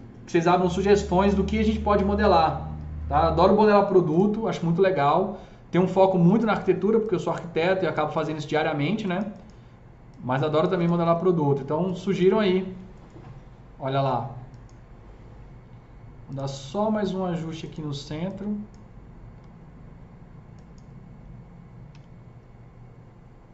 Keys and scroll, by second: 21.9 w.